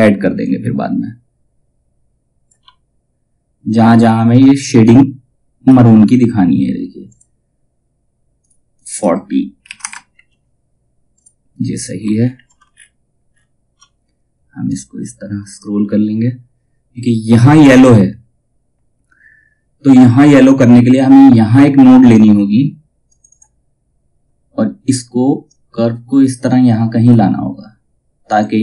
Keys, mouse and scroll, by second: 9.7 Tab, 10.7 click, 11.2-11.5 scroll down 1, 12.2-13.3 alt+scroll down 1, 13.4 ctrl+scroll down 1, 14.2-22.6 drag, 25.0-28.6 drag, 25.8 typing.